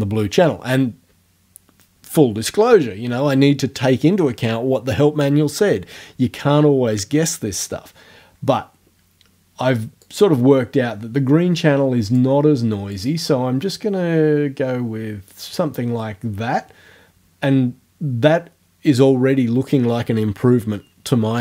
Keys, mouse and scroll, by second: 10.0-12.4 drag, 12.9-15.7 drag.